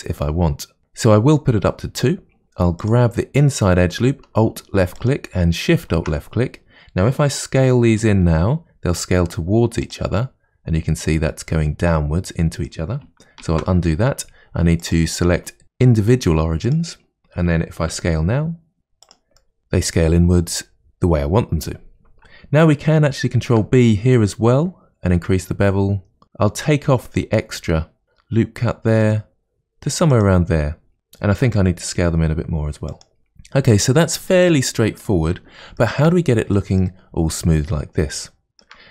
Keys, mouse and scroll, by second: 0.8 click, 2.8 alt+click, 4.9 alt+shift+click, 8.0 s, 10.2-13.2 middle drag, 13.4 ctrl+z, 14.8-16.5 drag, 17.9 s, 19.4 middle click, 23.4 ctrl+b, 31.3 s, 33.2-33.7 scroll down 1, 33.7-35.3 middle drag, 35.3-35.8 scroll down 2, 35.8-38.9 shift+middle drag.